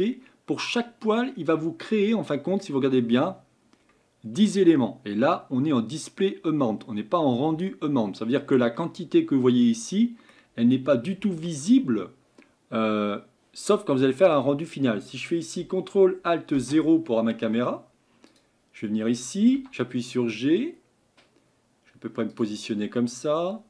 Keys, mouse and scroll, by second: 2.7 scroll up 1, 8.3 scroll down 4, 8.8-16.5 middle drag, 16.5 ctrl+alt+KP_0, 18.4 Left, 23.3 scroll down 1.